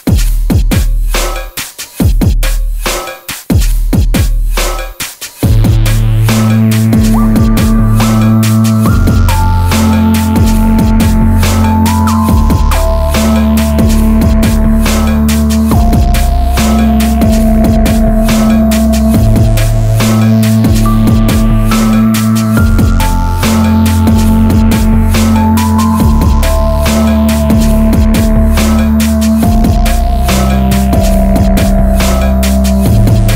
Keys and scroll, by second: 29.3 Tab, 32.6 ctrl++, 33.2 ctrl++.